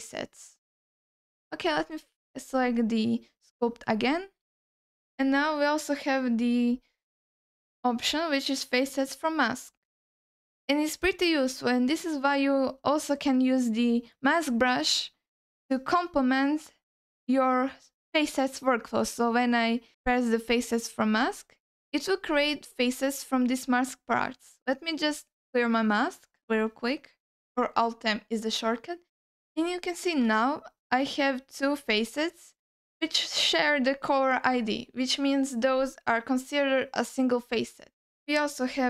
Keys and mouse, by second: 0.3-1.2 drag, 2.5-3.9 drag, 5.1-21.3 drag, 22.4 alt+middle click, 25.0-26.2 drag, 27.0 middle click, 28.9 alt+shift+middle click, 29.6 ctrl+alt+middle click, 35.6 click, 38.7-38.8 drag.